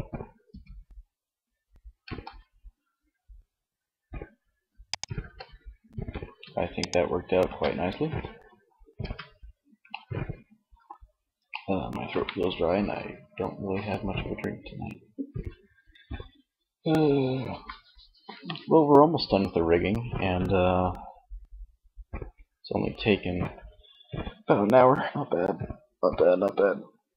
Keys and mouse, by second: 4.0 click, 4.3 ctrl+z, 5.4 ctrl+s, 6.7 Tab, 8.2 Tab.